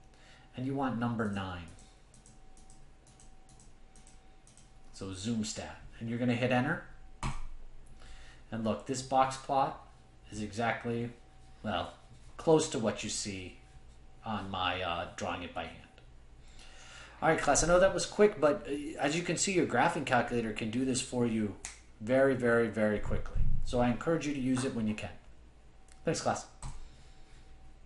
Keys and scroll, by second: 1.3 Return, 1.3 Down, 1.3 Right.